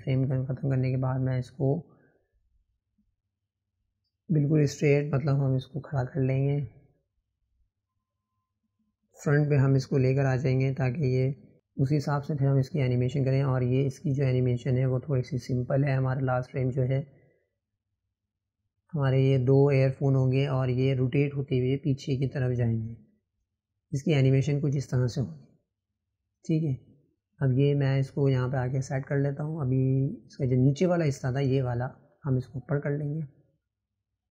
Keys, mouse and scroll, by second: 4.2 click, 5.2 click, 7.1 click, 9.3-10.4 drag, 14.9 click, 17.5-17.8 scroll up 5, 18.0-20.8 shift+middle drag, 20.8 click, 22.0 click, 31.7-33.1 drag.